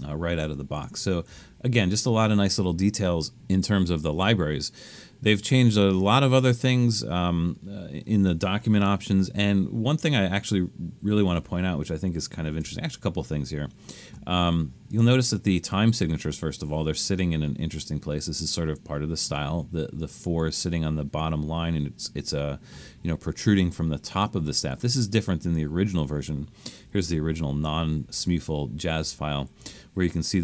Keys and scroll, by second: 1.3 BackSpace, 11.8 super+=, 12.3 super+=, 27.1 super+=, 27.5 super+=, 28.0 super+=, 28.5 super+=, 29.0 super+=, 29.5 super+=.